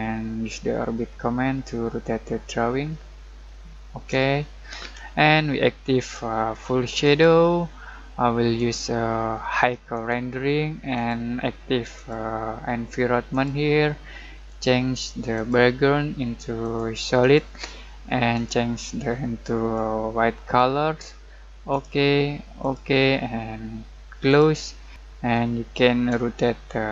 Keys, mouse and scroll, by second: 5.9-24.9 drag, 25.4 middle click, 26.4-26.9 shift+middle drag.